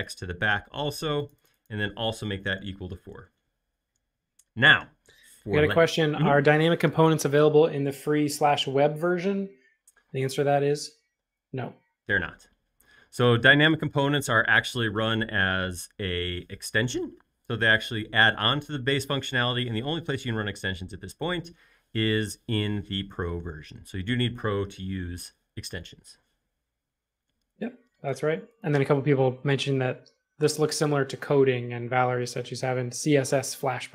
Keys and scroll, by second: 2.6-3.5 typing.